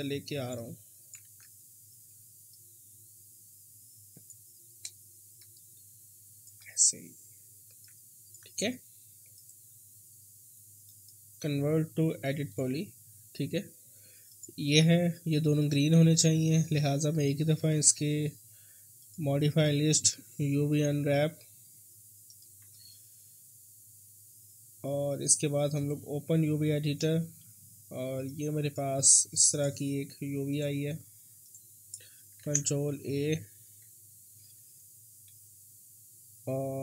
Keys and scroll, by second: 1.2 ctrl+z, 20.3-20.8 typing, 32.4 ctrl+a, 33.7 3.